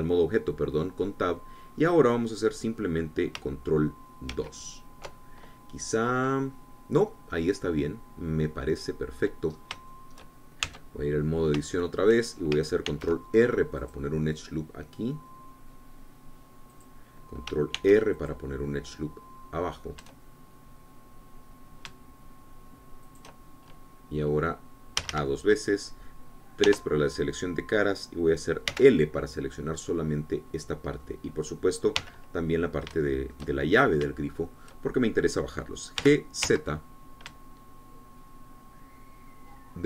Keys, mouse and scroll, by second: 5.7 ctrl+2, 7.3-8.2 scroll up 2, 8.2-10.4 drag, 10.6-10.9 scroll up 3, 11.0 shift+click, 11.7 shift+Tab, 12.7 shift+click, 13.9 ctrl+r, 14.9 click, 17.8 click, 18.9 ctrl+r, 19.5 ctrl+click, 24.2 shift+click, 26.1 a, 27.8 3, 29.8 l, 31.0-33.1 drag, 33.1 l, 34.1-36.3 shift+drag, 37.1 g, 37.6 z.